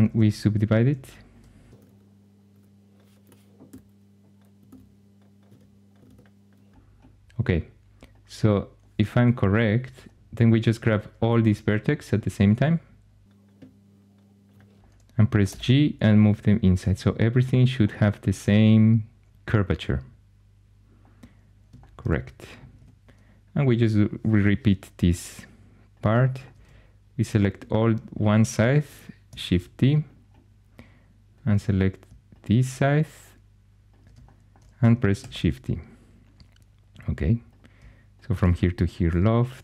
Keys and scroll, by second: 0.8 2, 1.7 shift+d, 3.2-6.0 typing, 9.0 1, 15.4 g, 22.7 2, 29.4 shift+d, 35.1 shift+d, 38.6 i.